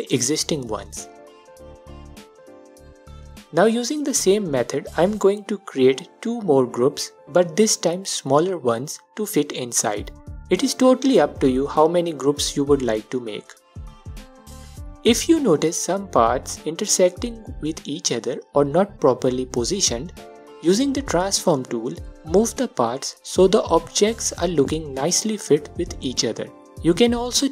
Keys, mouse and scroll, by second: 1.3 scroll down 2, 5.3 shift+d, 5.6 space, 6.7 s, 7.7 scroll up 1, 8.0-11.9 alt+drag, 8.4-8.9 scroll up 2, 10.6 shift+d, 10.9 space, 11.2 s, 12.3-14.5 drag, 14.2-14.5 scroll down 2, 14.8-18.5 alt+drag, 20.1-22.1 drag, 22.7-25.7 drag, 25.9-26.4 scroll down 1, 26.4-27.5 alt+drag.